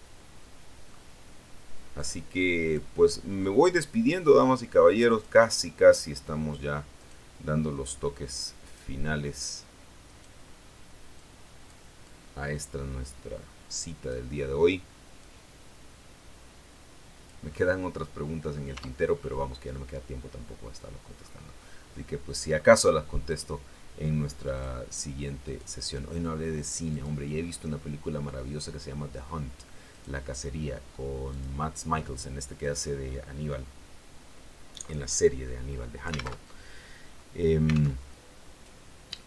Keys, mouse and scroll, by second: 1.8 click, 3.3-5.3 drag, 6.8 right click, 8.5 click, 10.0 right click, 11.0 click, 11.9-14.2 drag, 15.1-17.4 drag, 17.4-18.6 middle drag, 18.6 Tab, 19.0-19.6 scroll down 1, 19.6-20.9 middle drag, 21.0-21.5 scroll down 1, 21.5-22.6 middle drag, 22.6-22.9 scroll up 1, 23.2 right click, 24.4 click, 25.3 right click, 26.8 click, 27.4-27.7 scroll down 2, 27.7-29.3 middle drag, 29.8 right click, 31.2 click, 31.5-32.5 scroll down 2, 32.5 right click, 36.2 alt+Tab, 37.8 alt+Tab, 38.3-39.2 drag.